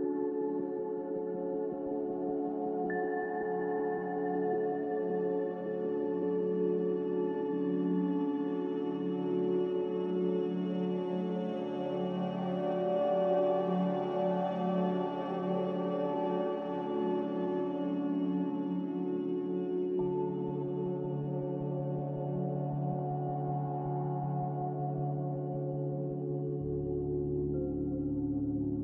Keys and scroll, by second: 1.8 ctrl+z, 5.0 5, 5.5 Return.